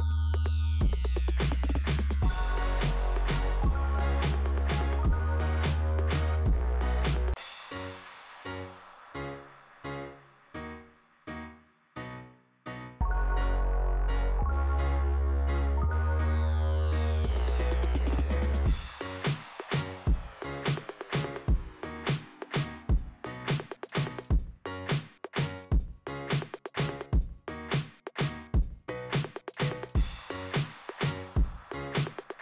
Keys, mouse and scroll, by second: 2.1 scroll up 2, 3.3 click, 4.3 click, 6.1 click, 8.1 click, 9.9-10.3 scroll down 1, 12.3 scroll up 1, 12.9 click, 13.6 click, 14.5 click, 15.9 click, 20.5 click, 21.5 click, 27.4 click, 29.0 click, 29.9 click.